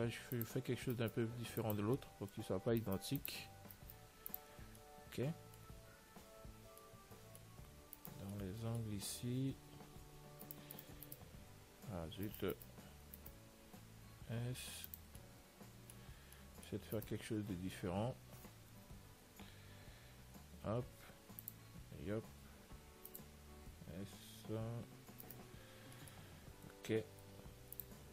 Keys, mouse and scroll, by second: 2.2-4.0 middle drag, 5.1 middle click, 5.6-7.4 middle drag, 8.3-10.8 middle drag, 8.3-10.2 right drag, 10.8-15.4 right drag, 14.3 s, 15.4-18.5 middle drag, 17.2-19.0 right drag, 19.8-22.0 middle drag, 20.9 r, 22.0 g, 24.0 s, 26.1-28.1 middle drag, 27.1 Tab, 27.9 ctrl+s.